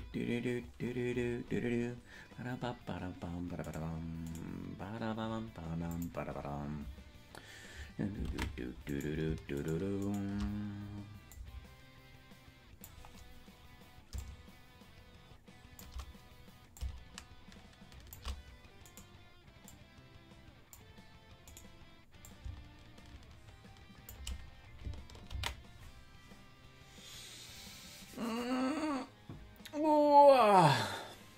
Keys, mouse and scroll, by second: 0.6-1.9 scroll down 10, 3.8 right click, 4.8 right click, 5.9 click, 8.3 ctrl+Tab, 9.0 right click, 9.7 shift+right click, 11.4-13.0 drag, 14.2-15.9 shift+drag, 16.7-18.2 drag, 18.9 right click, 19.6-20.8 drag, 21.6 right click, 22.2-24.2 drag, 28.6 ctrl+s.